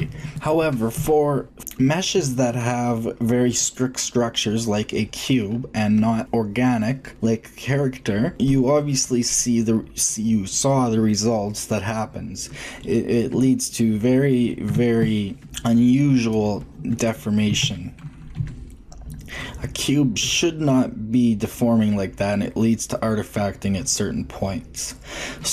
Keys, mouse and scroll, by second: 0.3 ctrl+z, 0.8-2.7 middle drag, 11.4-15.5 middle drag, 13.3 Tab, 14.6 Tab, 17.6 ctrl+Tab, 18.3 g, 23.4-25.0 middle drag.